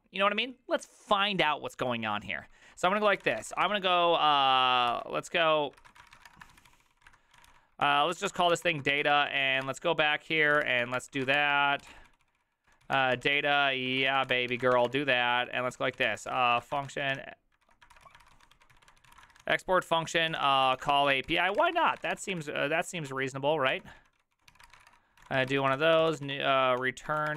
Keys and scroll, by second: 3.0-4.2 typing, 5.0 ctrl+c, 5.7-27.3 typing, 18.0 ctrl+c.